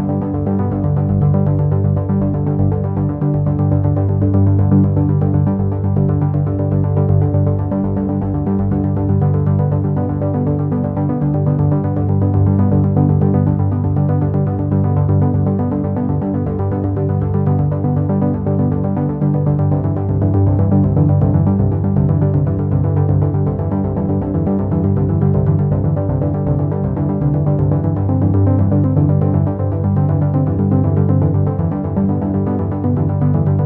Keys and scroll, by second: 4.9 ctrl+z, 8.9 ctrl+z.